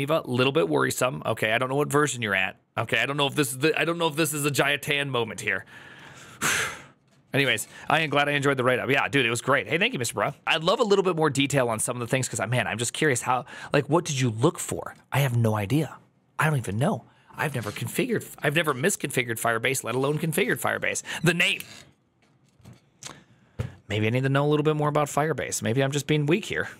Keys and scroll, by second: 5.8 alt+[, 10.1 alt++.